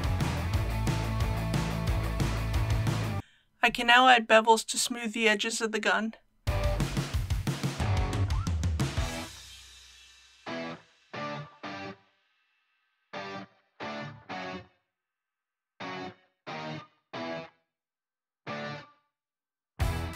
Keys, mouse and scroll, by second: 0.7 click, 1.1 Tab, 1.5 alt+a, 2.2 click, 3.2-5.2 middle drag, 5.6 scroll down 1, 6.4 click, 7.0 ctrl+click, 7.1 ctrl+click, 7.3 Tab, 7.4 1, 7.5 2, 7.7 shift+middle click, 7.8 middle click, 8.1 scroll up 1, 8.1 middle click, 8.3 alt+shift+click, 8.9 middle click, 9.1 alt+shift+click, 9.5 middle click, 9.6 alt+shift+click, 9.9 middle click, 10.2 alt+shift+click, 10.4 middle click, 10.6 alt+shift+click, 10.8 middle click, 11.1 alt+shift+click, 11.4 alt+shift+click, 11.4 middle click, 12.5 alt+shift+click, 12.8 middle click, 12.9 alt+shift+click, 13.5 middle click, 13.7 alt+shift+click, 13.8 middle click, 14.5 alt+shift+click, 14.6 alt+shift+middle click, 14.7 middle click, 14.8 alt+shift+click, 15.2 middle click, 15.4 alt+shift+click, 15.5 middle click, 15.8 alt+shift+click, 16.3 middle click, 16.6 alt+shift+click, 17.1 alt+shift+click, 17.6 middle click, 17.9 alt+shift+click, 18.1 alt+shift+middle click, 18.7 middle click, 18.9 middle click, 19.2 alt+shift+click, 19.4 middle click, 19.6 alt+shift+click, 20.0 middle click.